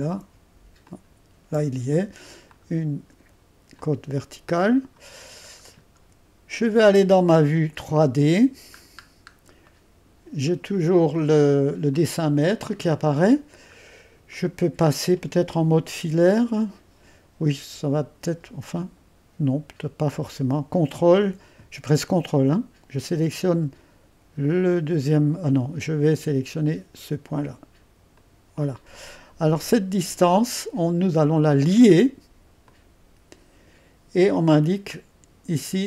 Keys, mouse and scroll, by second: 2.0 middle click, 2.6-5.5 drag, 5.6-7.0 scroll down 1, 7.9 click, 8.8-9.7 scroll up 2, 9.7-11.7 scroll up 1, 11.7 scroll up 1, 11.9-13.8 drag, 13.8-14.4 scroll up 2, 14.4-18.1 middle drag, 20.2-21.6 drag, 28.2-29.7 drag, 32.7-34.0 drag.